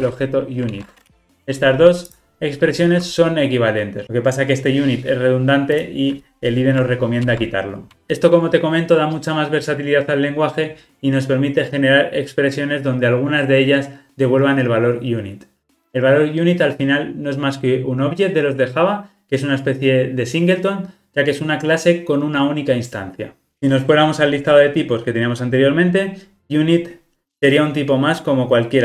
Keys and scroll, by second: 0.0 Escape, 0.7 alt+super+l, 1.0 ctrl+alt+o, 7.3 alt+Return.